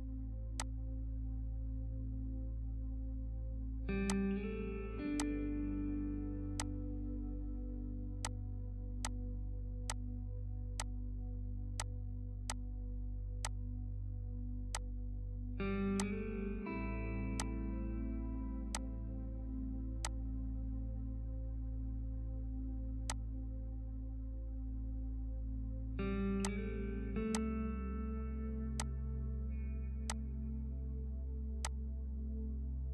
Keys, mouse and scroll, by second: 4.1-23.0 drag, 23.0-32.9 drag.